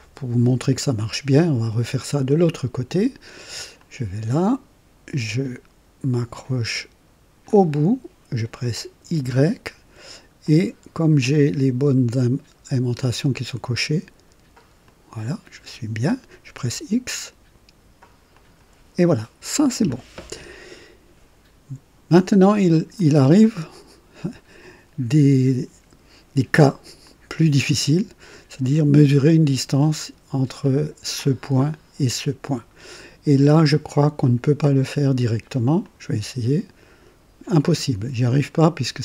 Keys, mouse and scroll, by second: 3.7 click, 7.3 click, 9.1 y, 14.8 click, 16.5 x, 18.2 click, 22.9-23.9 drag, 27.0-27.7 drag, 35.7 click.